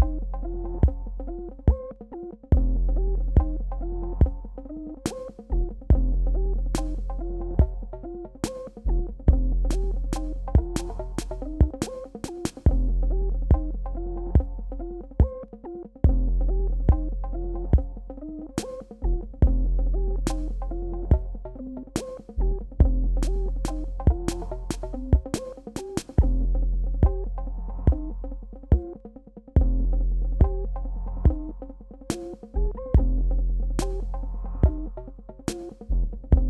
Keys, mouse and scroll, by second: 2.4 ctrl+z, 2.6-6.0 drag, 6.0 ctrl+z, 9.3-28.0 drag, 28.5 alt+scroll down 1, 30.0 alt+scroll up 1, 32.0 click, 33.5 alt+scroll up 1, 35.8-36.4 alt+scroll down 2.